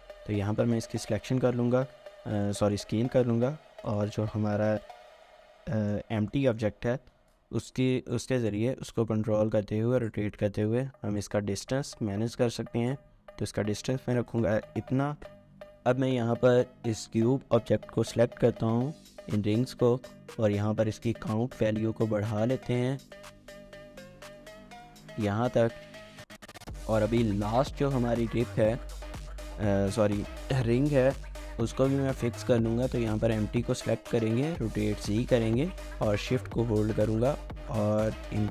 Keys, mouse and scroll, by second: 0.3 scroll down 1, 0.5 typing, 0.6 shift+middle click, 1.2 scroll down 1, 1.4 shift+middle click, 1.8 scroll down 1, 2.0 shift+middle click, 2.9 scroll down 1, 3.1 shift+middle click, 4.7 shift+middle click, 4.8 scroll up 1, 5.1 shift+middle click, 5.4 scroll up 1, 6.3 shift+middle click, 6.6-7.9 typing, 6.6 shift+scroll up 1, 9.1 typing, 10.5 typing, 11.9 typing, 14.3 shift+click, 14.7 shift+middle click, 24.8 double click, 26.1-26.4 scroll up 1, 26.4 middle click, 32.0 scroll down 1, 32.3 shift+middle click, 34.4-35.2 typing, 38.4 shift+click.